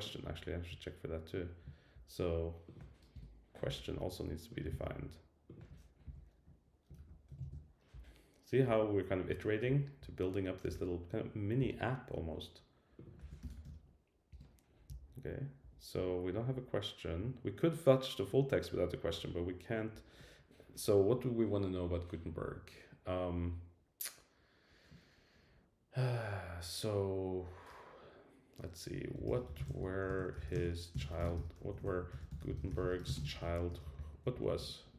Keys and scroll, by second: 3.1 Return, 4.7 super+c, 7.4 super+v, 14.3 Return, 31.7 alt+shift+Left, 34.3 alt+Left, 34.9 alt+Left.